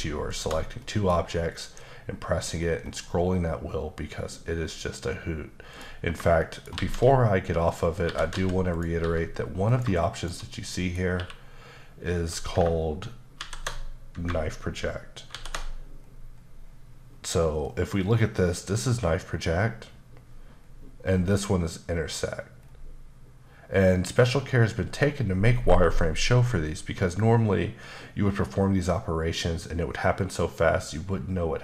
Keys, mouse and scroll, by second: 0.3 shift+click, 0.8 middle click, 1.6 shift+b, 2.3-2.8 shift+scroll down 4, 2.8-3.8 shift+scroll up 5, 3.8-5.7 shift+scroll down 4, 5.7 shift+click, 6.4 shift+middle click, 6.8 shift+a, 7.7 click, 8.1-9.0 typing, 8.7 click, 9.7 click, 10.2 shift+click, 10.5 middle click, 11.1 q, 13.4 ctrl+shift+v, 15.3 ctrl+shift+b, 16.0-19.2 scroll down 5, 20.1-21.0 scroll down 2, 21.0 scroll up 1, 21.6-22.2 scroll up 1, 22.2-22.6 scroll up 1, 22.6-25.1 scroll down 3.